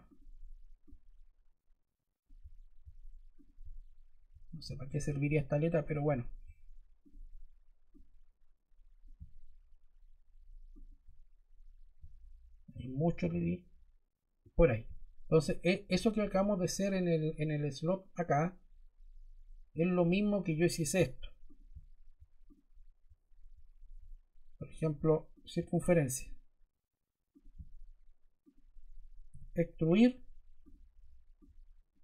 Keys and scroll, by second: 29.4 e.